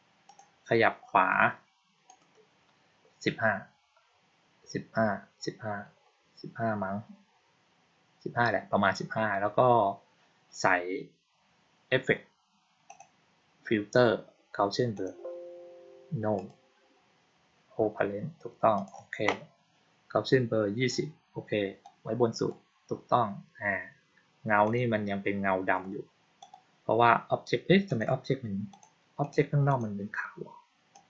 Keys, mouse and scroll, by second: 0.2 click, 2.0 click, 2.7-8.1 middle drag, 2.7-8.1 scroll down 2, 12.8 click, 14.8 click, 16.3 click, 18.6 click, 21.7 click, 24.5 click, 26.3 click, 27.8 click, 28.6 click, 29.1 click, 29.6 click, 30.8 click.